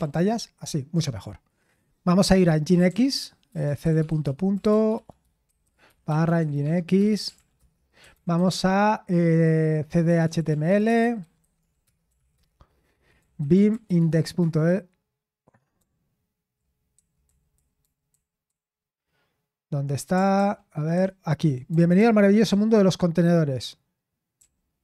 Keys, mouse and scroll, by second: 2.3-14.4 typing, 15.7-16.9 typing, 18.0 typing, 20.3 typing, 22.4 ctrl+c, 24.1-24.8 typing.